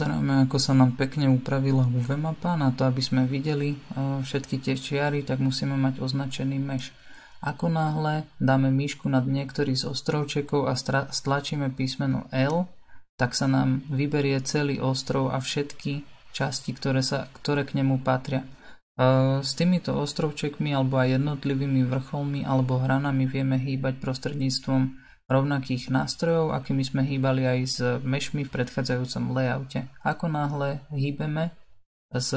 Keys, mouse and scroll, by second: 1.4-30.8 drag, 30.8 l, 32.1 g.